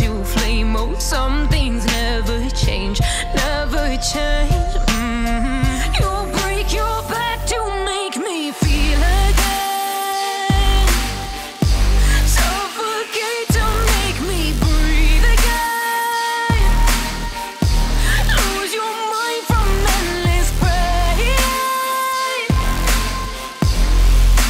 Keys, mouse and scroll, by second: 3.0 click, 6.7 click, 14.0 KP_9, 14.9 Tab, 18.4 ctrl+z, 21.6 x, 21.9 click, 22.1 z, 23.9 z.